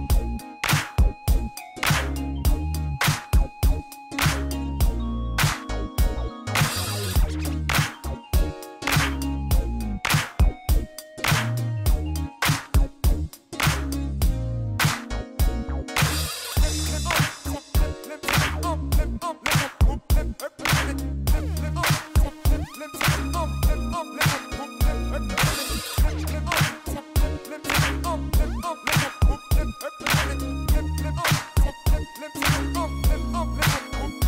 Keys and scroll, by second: 7.3 shift+d, 7.5 y, 9.4 Escape, 10.5 g, 10.7 x, 16.7 ctrl+j, 18.9 g, 21.2 shift+z, 22.6 g, 22.7 z, 26.3 g, 27.9 g, 28.0 z, 29.1 alt+a.